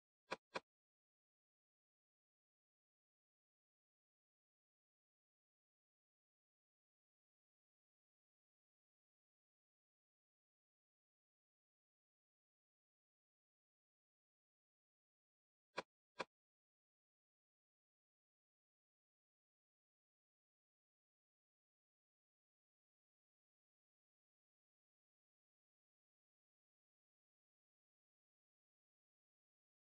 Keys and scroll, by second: 14.3 super+=.